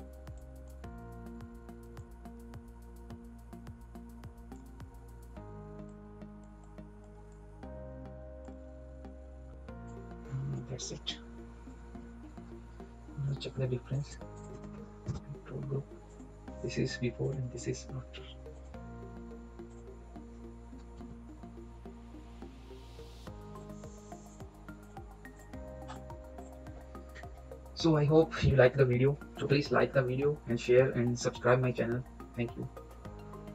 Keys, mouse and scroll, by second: 8.8 scroll up 1, 9.5 click, 11.7 ctrl+click, 11.8 ctrl+-, 13.9 click, 14.0 shift+click, 15.0 ctrl+g, 16.1 click, 20.8 ctrl+click, 20.9 ctrl+=, 22.4 ctrl+-, 23.5 click, 29.3 scroll down 1.